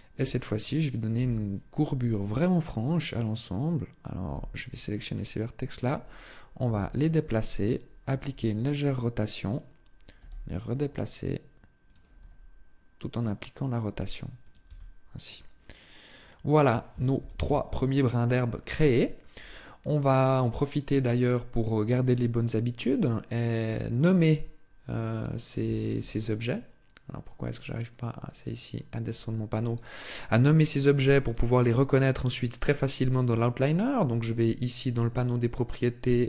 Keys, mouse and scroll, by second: 0.9 KP_3, 4.0 b, 6.4 g, 7.2 click, 7.9 r, 9.2 click, 11.7 click, 11.9 r, 14.2 click, 14.4 Tab, 15.1 middle click, 16.9 KP_7, 17.8-18.4 scroll down 1, 18.4 shift+middle click, 20.0 scroll down 1, 21.7 click, 23.4 click, 25.4 Tab, 27.0 click, 28.5 click, 30.6 click, 31.0 click, 31.7 click, 35.4 click.